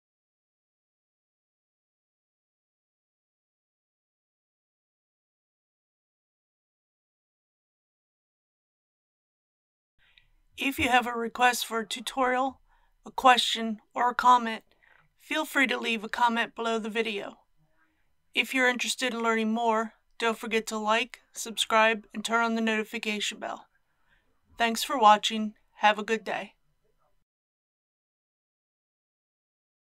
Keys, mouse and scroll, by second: 4.0-4.7 scroll down 1.